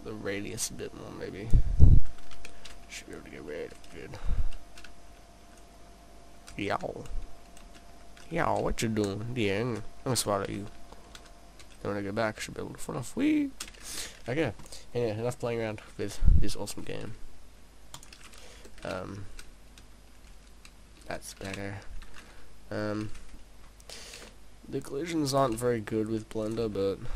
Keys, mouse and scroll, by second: 2.4 p, 14.7 middle click, 16.0 middle click, 17.1 s, 18.1 click, 18.6 click, 22.9 middle click, 24.2 shift+d, 24.9 shift+d, 25.4 click, 25.6 shift+d, 26.6 click, 26.7 shift+d.